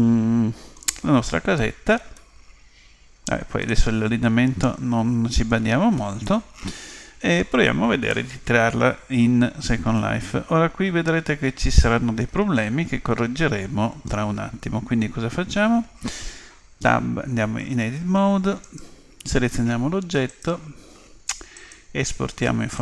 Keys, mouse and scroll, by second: 2.1-4.0 middle drag, 4.6-7.9 middle drag, 8.1 middle click, 10.0-11.9 middle drag, 16.8 Tab, 18.6-20.5 right drag, 20.3-22.1 drag.